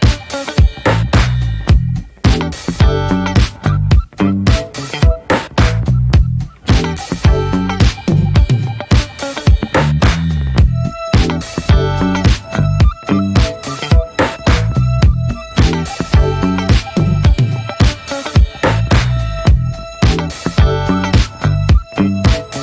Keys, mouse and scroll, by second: 0.3 ctrl+j, 1.9 click, 2.1-2.5 middle drag, 2.5 ctrl+s, 2.7 click, 3.5 click, 3.9 scroll up 1, 4.2 alt+middle click, 5.0 shift+middle click, 5.1-5.7 scroll up 1, 5.7 shift+middle click, 6.2 scroll down 1, 6.5-8.1 middle drag, 8.1 scroll up 1, 8.2 scroll down 1, 8.4 shift+middle click, 8.7 shift+scroll up 1, 8.8 scroll down 1, 9.1-11.2 middle drag, 11.2 ctrl+s, 11.4-18.5 middle drag, 18.5-20.2 scroll up 4, 20.2 f, 21.9 scroll down 1, 22.1-22.6 middle drag.